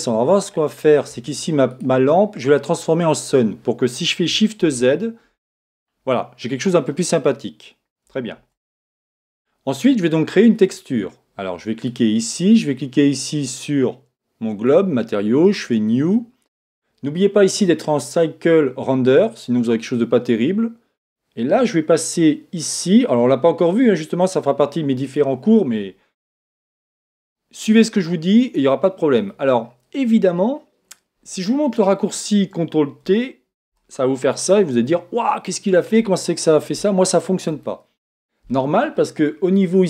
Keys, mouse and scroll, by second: 0.0-1.7 middle drag, 1.7 right click, 3.0 click, 4.6 shift+z, 5.3-8.6 middle drag, 8.3 shift+z, 10.5 click, 11.8 right click, 14.5-21.3 drag, 22.7 click.